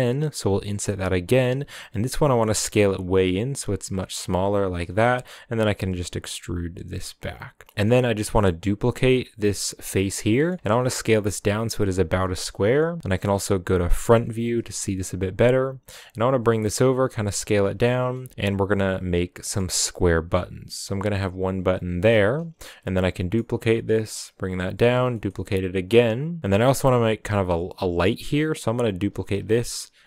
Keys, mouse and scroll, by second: 0.4 i, 1.8 s, 4.9 middle click, 5.3 e, 7.6-8.9 middle drag, 8.9 shift+d, 10.3 middle drag, 10.6 s, 13.9 KP_1, 14.6-15.2 scroll up 4, 15.5 g, 16.4 s, 17.2 s, 18.3-22.8 typing, 24.9 shift+d, 26.6 shift+d, 29.0 s.